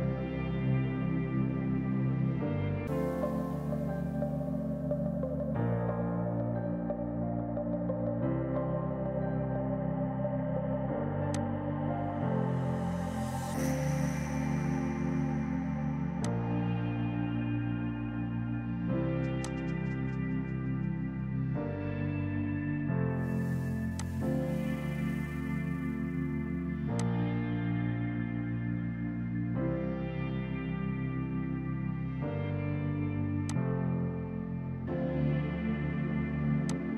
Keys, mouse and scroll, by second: 11.4 click, 13.8 KP_1, 14.5 KP_Enter, 16.3 click, 17.4 KP_7, 19.5 click, 21.2 KP_9, 22.5 KP_Enter, 24.0 click, 25.3 KP_1, 25.8 KP_Enter, 27.0 click, 27.9 KP_4, 33.2 space, 33.5 click, 33.8 Delete, 36.7 click.